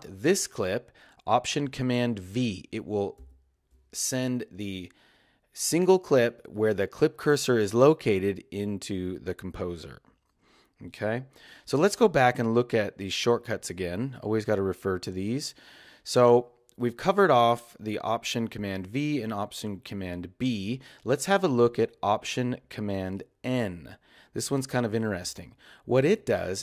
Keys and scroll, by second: 3.2 alt+super+v, 11.6 space.